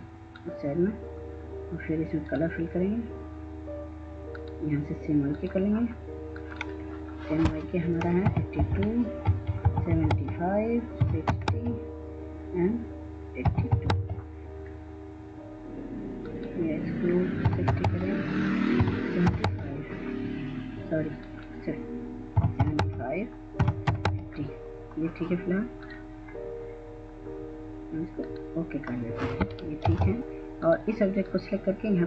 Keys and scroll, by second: 7.7 8, 8.0 2, 8.7 Tab, 9.0-10.9 typing, 10.9 Tab, 12.6-13.8 typing, 15.2 typing, 16.6-19.4 typing, 21.6-23.5 typing, 29.3 ctrl+space.